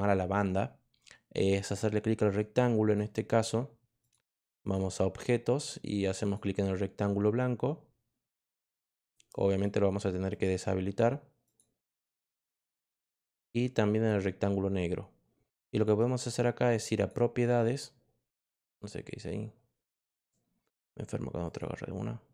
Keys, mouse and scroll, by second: 1.5 click, 2.8 click, 3.9 click, 4.6 click, 6.2 click, 8.7 click, 9.4 click, 10.2 click, 11.4 click, 13.1 click, 13.9 click, 15.7 click, 16.9 click, 18.7 click, 20.0 click, 21.4 click.